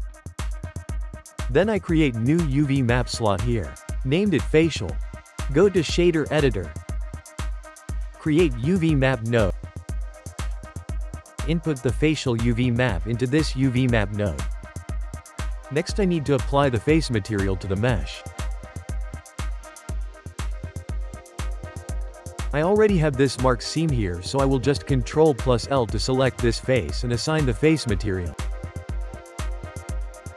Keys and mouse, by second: 0.1 click, 1.6 click, 3.0-4.9 drag, 6.4 shift+a, 10.4 click, 11.5-12.4 ctrl+middle drag, 12.4-13.7 drag, 15.7 click, 17.7 Tab, 18.5 click, 19.5 3, 19.7 click, 21.0 ctrl+l, 21.9-24.7 ctrl+middle drag, 25.1-26.6 middle drag, 26.6 click, 28.2-30.3 drag.